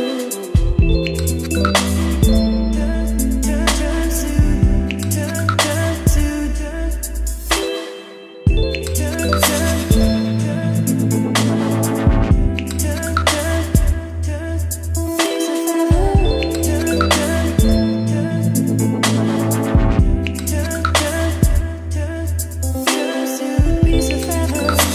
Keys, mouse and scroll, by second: 0.0-0.7 typing, 1.8-5.5 typing, 6.8-8.1 typing, 8.4 Return, 9.7-12.9 typing, 15.5-19.0 typing, 20.2 Return, 21.1-23.0 typing, 24.7-24.9 typing.